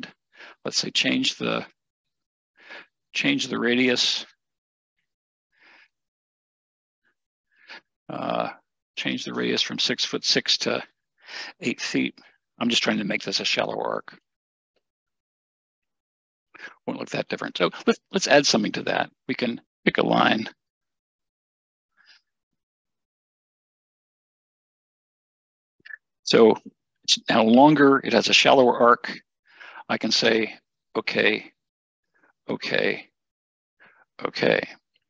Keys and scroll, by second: 12.0-12.4 typing, 19.6 Escape, 25.1 Escape.